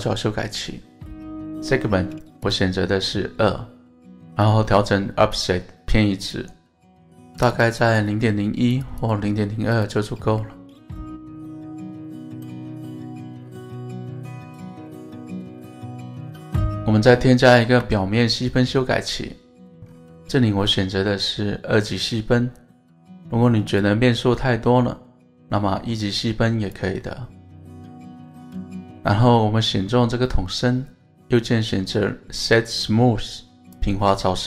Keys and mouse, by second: 2.4 click, 4.5-6.3 drag, 7.4 click, 7.6 click, 7.8 click, 8.2 click, 8.8 click, 9.7 click, 11.0-11.6 middle drag, 12.1-12.7 middle drag, 12.9-13.7 middle drag, 15.3 middle click, 18.7 ctrl+2, 19.2 middle click, 20.1-21.5 middle drag, 23.7 click, 24.8 click, 26.7 click, 27.6 click, 30.4-30.8 middle drag, 31.2-33.9 right drag.